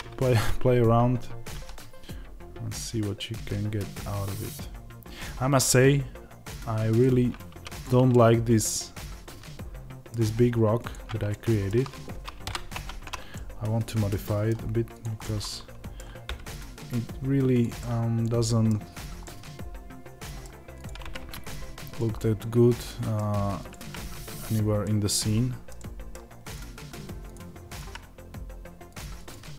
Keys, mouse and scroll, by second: 6.9 click, 8.0-10.8 middle drag, 10.8 click, 11.2-14.9 shift+middle drag, 12.3 KP_Divide, 12.6 Tab, 14.9 click, 15.1-20.8 middle drag, 16.2 g, 20.8 click, 21.9 click, 22.1-23.6 middle drag, 23.6 click, 23.7 g, 24.7-26.4 middle drag, 26.4 click.